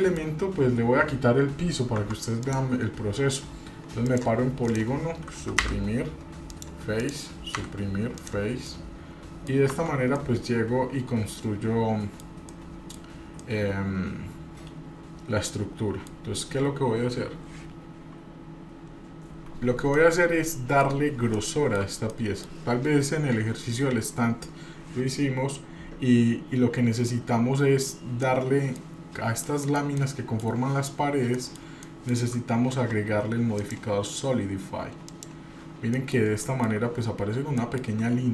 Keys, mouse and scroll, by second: 0.3-1.1 scroll up 1, 2.0 Tab, 2.4 click, 4.0 click, 4.7 click, 5.6 Delete, 7.0 click, 7.6 Delete, 8.7 middle click, 9.7 Tab, 10.2-12.2 middle drag, 12.5 middle click, 13.3-16.1 middle drag, 16.4 scroll down 2, 20.0-20.9 middle drag, 20.9 scroll up 3, 21.3-21.7 shift+middle drag, 22.1 middle click, 28.2-28.8 middle drag, 29.0-29.4 scroll up 2, 29.4 middle click, 30.0-30.5 shift+middle drag, 30.8 scroll down 1, 31.3 middle click, 31.8-32.1 shift+middle drag, 33.6-35.3 drag, 35.9 middle click, 36.4 shift+middle click, 36.8-37.4 scroll up 2, 37.6 shift+middle click, 37.9 scroll up 3.